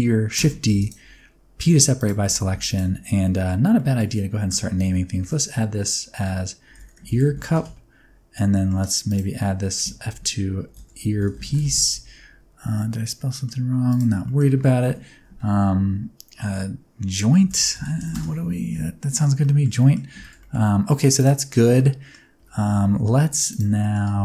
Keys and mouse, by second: 0.4 shift+d, 1.6 p, 2.3 Tab, 3.2 middle click, 3.7 middle click, 5.2 F2, 8.6 middle click, 9.7 F2, 13.3 middle click, 13.9 click, 14.3 middle click, 14.8 F2, 19.4 middle click, 19.8 click, 19.8 right click, 20.1 alt+a, 20.4 middle click, 20.6 middle click, 21.7 middle click, 22.4 Tab, 23.4 1, 23.5 alt+click, 23.8 middle click, 24.1 s.